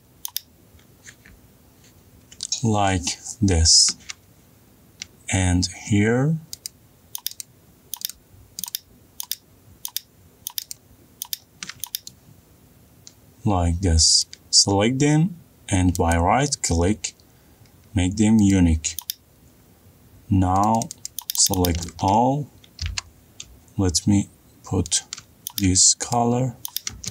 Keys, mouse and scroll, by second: 14.8 middle click, 16.7 right click, 19.1 click, 20.2-21.3 scroll, 21.6 click, 21.7 click, 22.2-22.7 scroll, 22.7 middle click, 23.5 b, 25.6 alt+click, 26.8 click.